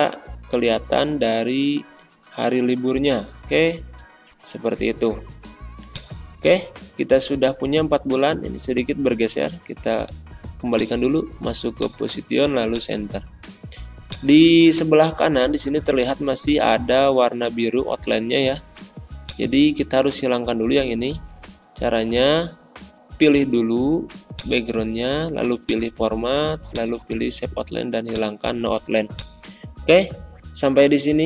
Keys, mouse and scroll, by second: 1.2 Left, 1.4 Delete, 4.7 ctrl+z, 5.8 click, 6.5-6.9 ctrl+scroll down 1, 10.6 click, 16.4 ctrl+scroll up 1, 19.2-22.5 drag, 24.3 click, 29.5-29.9 ctrl+scroll down 1.